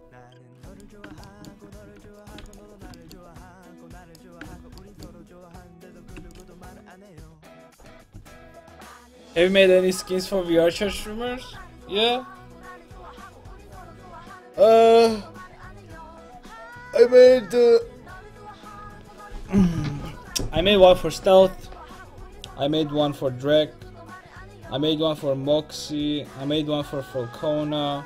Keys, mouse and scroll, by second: 2.5 x, 6.3 x, 7.5-9.5 right drag.